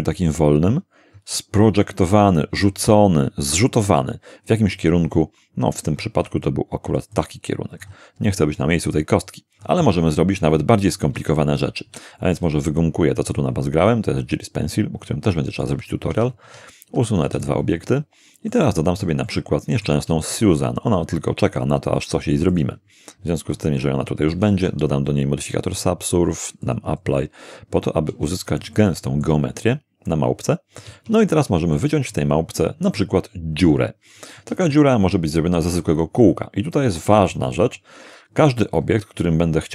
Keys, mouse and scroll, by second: 6.2 d, 6.4-8.0 drag, 6.5 d, 6.6 d, 11.2 Tab, 11.9 d, 12.4 d, 12.4-15.8 right drag, 12.6 d, 12.8 d, 16.1 Tab, 16.4 Tab, 17.2 x, 17.4 click, 18.5 middle click, 19.8 shift+middle click, 20.1 shift+a, 22.5 click, 24.3 ctrl+3, 25.8 click, 26.6 click, 27.8 scroll up 1, 28.1 Tab, 28.7-29.4 shift+middle drag, 30.1-31.0 shift+middle drag, 30.9 Tab, 31.3-31.9 middle drag, 32.1-33.2 middle drag, 34.5 shift+a, 37.5 click.